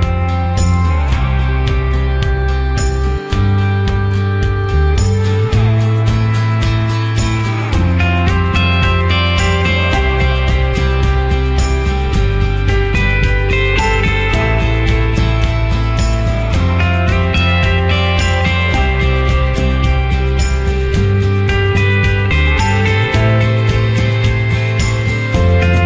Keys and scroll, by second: 6.8 ctrl+0.